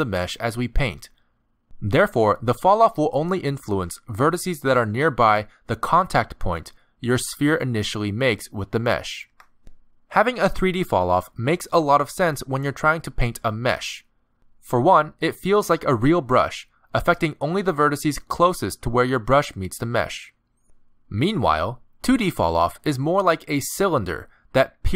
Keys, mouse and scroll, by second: 0.3-0.8 click, 0.5 click, 1.0 middle click, 1.5 scroll down 3, 1.6 middle click, 2.8 scroll up 3, 3.2 click, 8.2 ctrl+z, 9.1 click, 10.9 ctrl+z, 11.4 click, 12.7 middle click, 13.4 ctrl+z, 13.9 middle click, 14.7 click, 16.0 middle click, 17.1 ctrl+z, 17.5 middle click, 19.0 click, 19.2 middle click, 19.9 ctrl+z, 20.2 middle click, 22.8 click, 23.6 middle click, 23.9 f, 24.1 f.